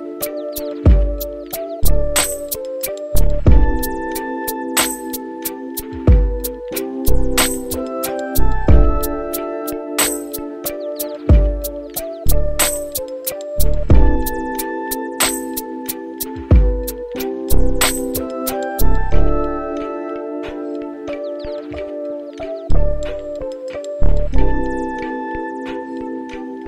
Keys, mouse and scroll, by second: 9.3 r, 16.3-17.4 right drag, 18.9-26.6 drag.